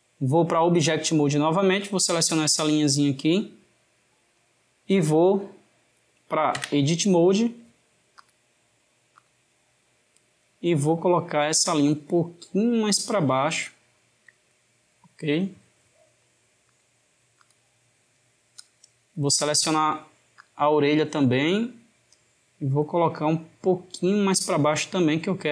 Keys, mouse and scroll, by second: 4.0-6.6 middle drag, 6.6 Tab, 8.2-11.5 drag, 16.6-18.7 drag, 20.3-23.2 drag.